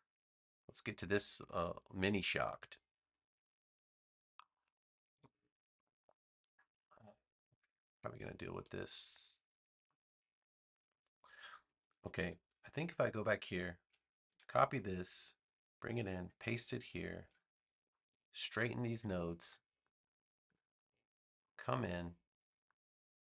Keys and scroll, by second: 14.2 super+c, 15.9 super+v, 17.2 a, 20.4 v.